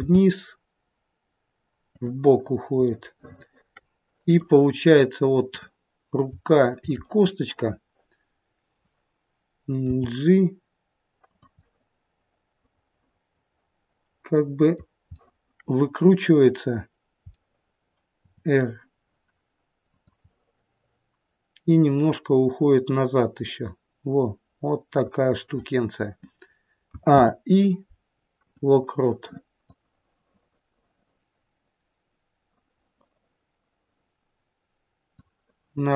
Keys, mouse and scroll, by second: 2.9 middle click, 5.4 click, 6.5 shift+click, 7.0 middle click, 9.8 g, 11.5 middle click, 15.1 middle click, 17.3 middle click, 18.2 r, 20.3 middle click, 26.8 a, 27.1 i, 29.7 click.